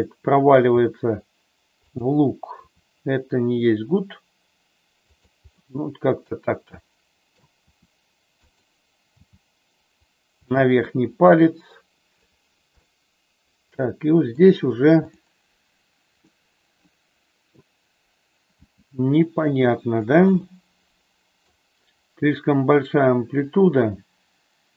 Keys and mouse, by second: 0.7 g, 1.8 click, 2.6 r, 5.1 click, 5.4-7.3 middle drag, 7.6 r, 8.4 click, 9.1 g, 10.4 click, 12.8-14.3 middle drag, 16.2-17.6 middle drag, 18.4 g, 20.3-21.4 middle drag.